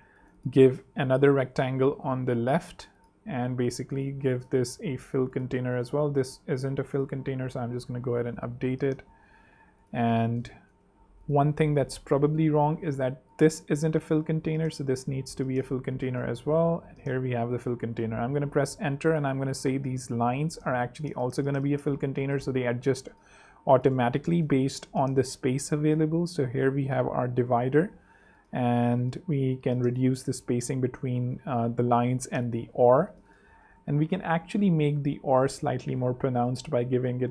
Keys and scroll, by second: 0.7 super+d, 1.1 super+Left, 7.7 super+3, 9.0 super+2, 10.0 alt+super+2, 10.1 alt+z, 10.4 alt+space, 11.1 space, 14.6 super+3, 15.0 super+2, 15.4 super+z, 16.1 z, 17.6 Return, 18.6 super+Return, 24.0 shift+super+2, 24.6 super+3, 27.6 super+2, 30.0-30.8 typing, 30.9 super+Home, 31.0 super+3, 32.2 super+2, 35.2 shift+super+..